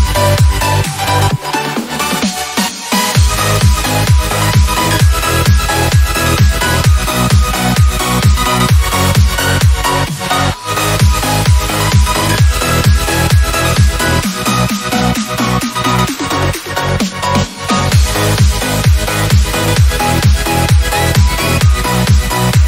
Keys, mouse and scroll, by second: 4.1-5.5 drag, 11.9-12.6 drag.